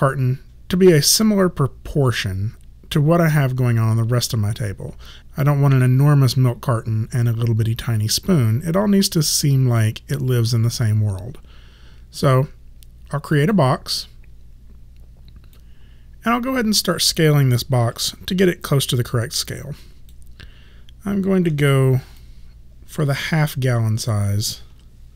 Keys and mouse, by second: 2.1 click, 13.4 click, 15.6 alt+click, 17.8 r, 18.5 click, 21.6 w, 22.2 click, 24.7 r.